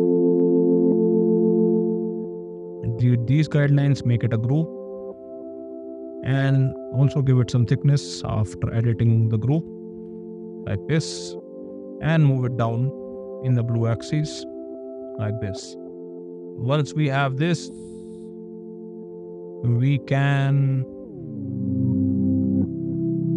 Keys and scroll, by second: 1.8 space, 2.6 d, 4.4 ctrl+g, 6.7 p, 8.8 ., 9.5 Return, 10.0 space, 11.8 m, 14.8 space, 18.3 ~.